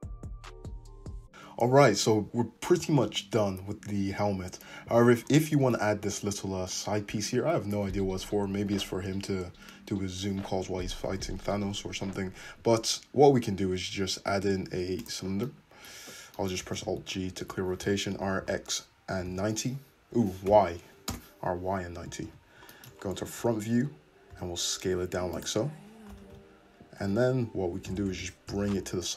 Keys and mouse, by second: 7.7 `, 11.1 shift+a, 15.1-22.8 middle drag, 16.7 alt+g, 17.8 r, 22.3 `, 22.8-29.1 drag, 23.4 Tab, 24.3 s, 26.2 alt+z, 27.2 Tab, 28.1 g.